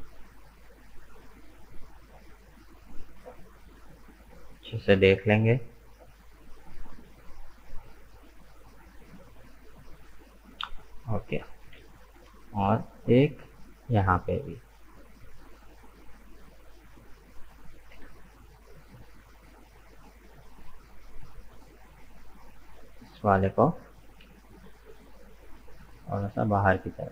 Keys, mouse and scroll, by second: 5.1-10.4 middle drag, 10.8 right click, 11.7 k, 18.7 right click, 19.2-21.5 middle drag, 21.5 right click, 22.2 shift+right click, 22.9 shift+right click, 23.3 middle click, 24.2 KP_1, 25.5 g.